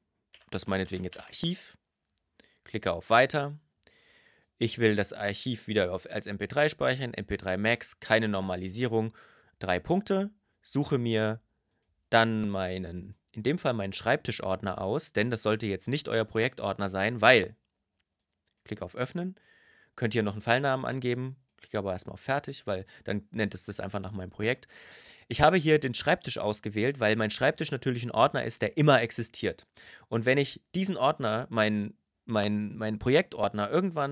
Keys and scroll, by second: 0.0 shift+a, 0.2 r.